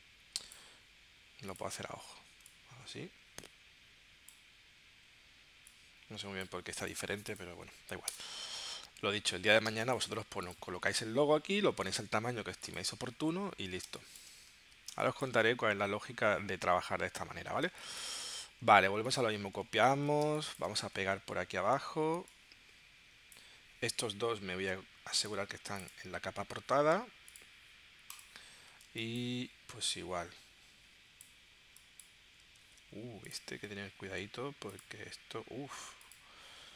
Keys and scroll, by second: 8.1 BackSpace, 9.7 space, 11.2 super+y, 14.0 space, 14.9 space, 17.7 space, 19.9 super+c, 20.3 space, 21.0 super+v, 28.8 space, 32.7 super+z.